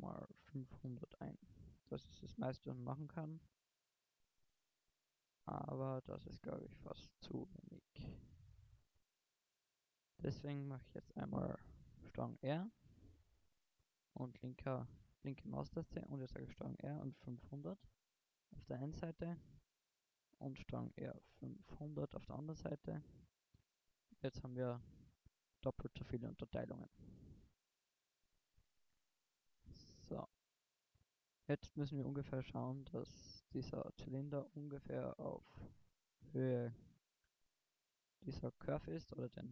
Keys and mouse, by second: 6.3 click, 9.1 ctrl+z, 12.0 ctrl+r, 14.6 a, 15.9 ctrl+r, 20.2 ctrl+r, 24.3-25.3 middle drag, 26.0 middle click, 26.9 Tab, 27.9 KP_1, 28.5 middle click, 32.4 click, 35.1 middle click, 35.3 middle click, 35.7 middle click, 36.4 g, 38.1-39.0 drag.